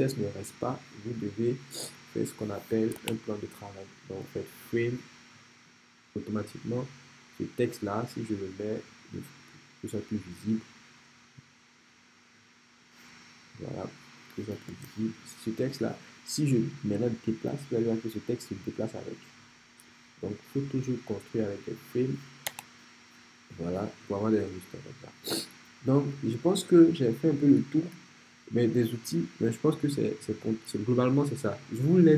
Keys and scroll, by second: 3.0 BackSpace, 4.2 f, 13.8-14.8 typing, 22.5 BackSpace.